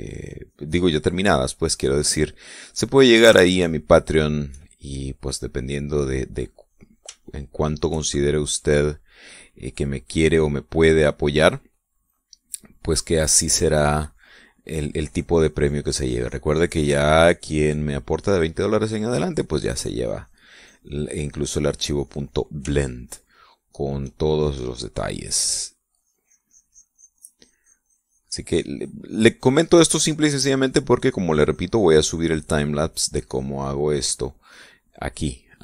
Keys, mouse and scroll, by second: 2.8-4.0 middle drag, 4.0-4.7 shift+middle drag, 4.8 shift+middle click, 6.4-7.6 drag, 7.8-8.6 shift+middle drag, 14.3-18.8 drag, 18.8 middle click, 19.6-22.4 drag, 22.6 click, 23.0 shift+middle click, 24.2 shift+middle click, 25.6 click, 26.0 middle click, 26.6-30.4 drag, 30.4 middle click, 31.1-35.0 drag, 35.2 middle click.